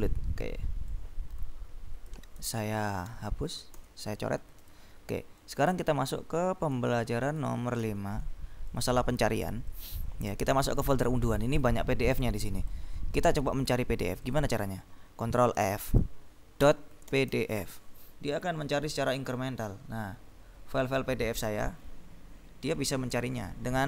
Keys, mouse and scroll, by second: 1.1-2.8 drag, 3.1 ctrl+b, 3.9 s, 4.7 click, 5.5-7.4 drag, 7.8 ctrl+b, 8.8 click, 10.0 click, 10.8 click, 11.5-13.4 drag, 14.3 click, 15.8 ctrl+f, 16.5-18.2 typing, 20.3-22.4 scroll down 2, 22.8-23.6 scroll down 2, 23.6-23.8 scroll down 1.